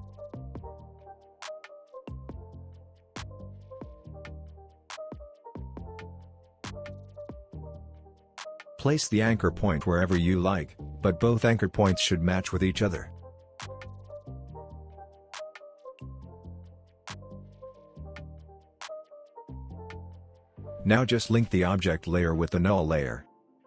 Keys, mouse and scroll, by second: 6.4 alt+scroll up 1, 7.1-8.0 click, 10.1-11.3 drag, 13.3-16.4 drag, 17.9-18.8 click, 19.2 alt+scroll down 2, 19.8 alt+scroll down 1, 21.0 click.